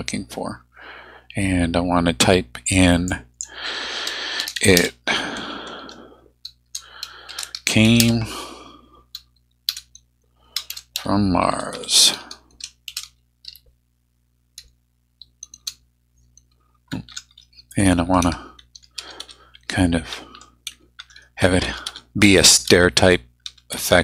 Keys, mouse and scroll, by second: 3.1 click, 4.2-5.8 typing, 6.7 Return, 7.1-8.4 typing, 9.7 Return, 10.7-14.6 typing, 12.2 Return, 15.6 Return, 17.1 BackSpace, 18.1 Up, 19.0 space, 20.1 Down, 20.7 Up, 21.0 Left, 21.4 space, 23.5 Down, 23.8 Left.